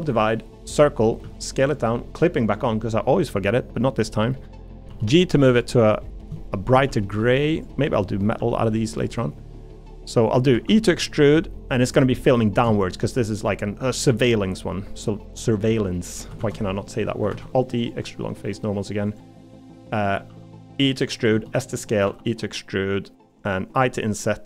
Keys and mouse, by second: 1.2 s, 2.8 middle click, 3.7 middle click, 4.1 middle click, 4.9 g, 5.8 middle click, 6.9 g, 7.8 middle click, 10.5 e, 12.1 middle click, 12.7 middle click, 13.8 middle click, 15.4 middle click, 16.4 ctrl+z, 16.9 middle click, 17.3 alt+e, 20.3 e, 21.3 s, 22.0 e, 23.8 i.